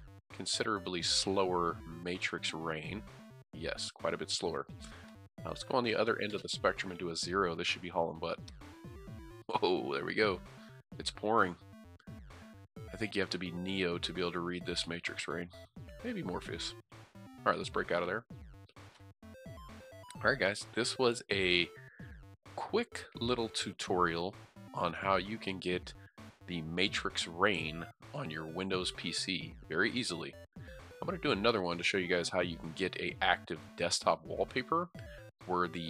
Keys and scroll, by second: 2.3-3.0 typing, 7.2 typing, 10.6-11.5 typing.